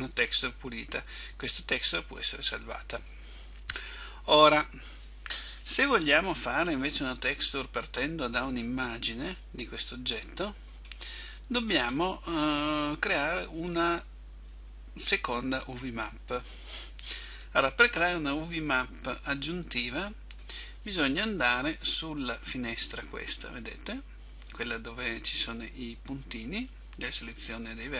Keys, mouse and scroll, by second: 6.5 middle click, 11.7-12.4 scroll up 2, 12.4 scroll down 1, 16.0-18.0 scroll down 2, 18.0-18.7 scroll up 1, 18.7 middle click.